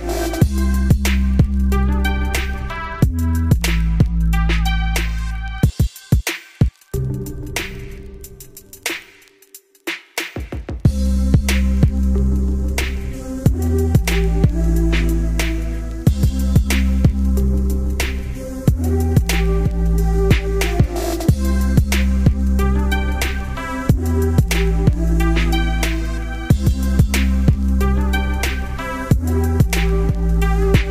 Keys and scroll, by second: 16.6 ctrl+space, 16.7 ctrl+z.